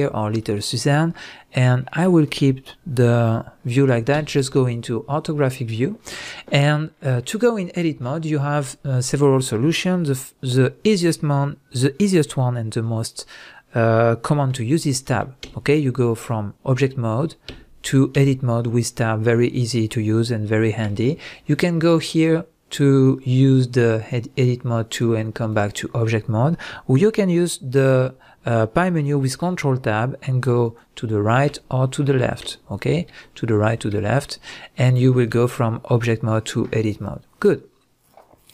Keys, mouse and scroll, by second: 0.0-0.4 scroll up 1, 0.4 middle click, 0.8 scroll up 1, 1.1 middle click, 4.1 KP_5, 13.9 middle click, 15.5 Tab, 18.9-22.1 middle drag, 22.1-38.5 drag, 29.3 ctrl+Tab, 35.0 scroll up 1, 35.4-38.5 scroll down 1.